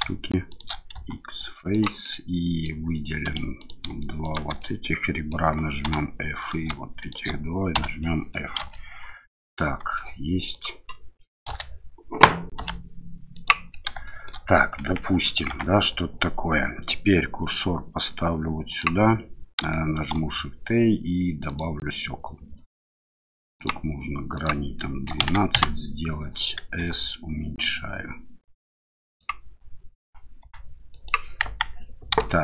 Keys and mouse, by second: 0.5 shift+click, 0.9 x, 2.0 middle click, 3.2 2, 3.6 click, 4.2 shift+click, 4.6 middle click, 5.8 f, 6.4 click, 7.0 shift+click, 7.7 f, 8.0 click, 8.6 KP_7, 9.5 middle click, 10.5 click, 11.5 KP_7, 12.5 g, 13.3 click, 14.0 shift+middle click, 14.8 Tab, 15.5 Tab, 18.7 click, 20.1 shift+a, 23.6 click, 24.3-26.1 drag, 26.8 s, 28.9 click, 30.4 s, 30.9 click, 31.4 KP_1, 32.2 shift+middle click.